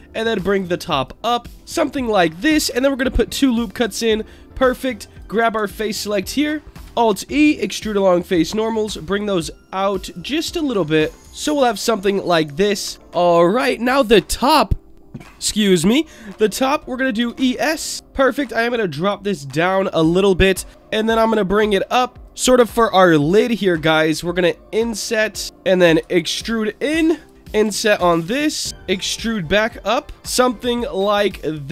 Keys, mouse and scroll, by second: 0.5 click, 1.0 click, 1.5 shift+middle click, 1.6-2.3 scroll up 1, 2.6 ctrl+r, 3.7 click, 5.1 click, 5.9 alt+click, 6.8 alt+e, 10.0 click, 10.5 middle click, 11.2-12.4 scroll up 9, 12.4 scroll up 1, 12.8 ctrl+KP_Add, 13.4 click, 17.1 e, 17.3 s, 17.9 click, 18.7-19.7 drag, 20.9 e, 22.2 click, 24.1 i, 25.4 click, 26.0 e, 27.1 click, 27.6 i, 28.7 click, 28.7 i, 29.2 e, 30.2 middle click, 30.2 click, 31.3 shift+middle click.